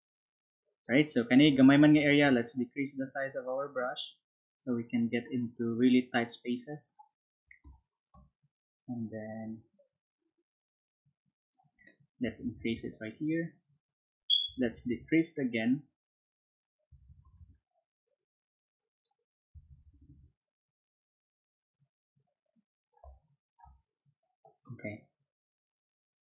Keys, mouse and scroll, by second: 2.4-7.1 drag, 7.6 click, 7.6 space, 8.8-11.4 drag, 13.0 click, 15.1-16.5 drag, 17.4-18.9 drag, 20.3-22.8 drag, 23.0 space, 23.0 click, 23.9-26.2 drag.